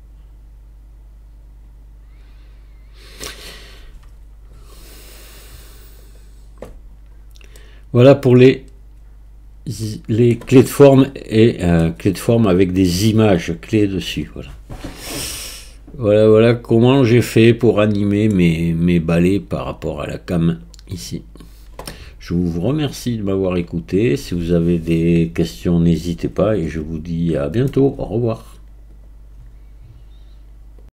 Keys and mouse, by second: 3.5 click, 6.1 click, 7.6-10.3 middle drag, 15.6-18.4 middle drag.